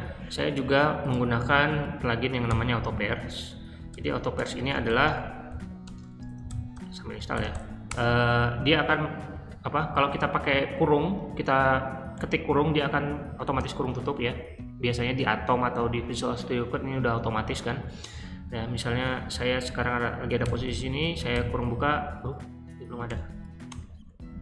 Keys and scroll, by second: 2.4-7.9 typing, 2.7 super+v, 18.3 q, 20.4 o, 21.2 shift+9, 23.0-24.4 typing.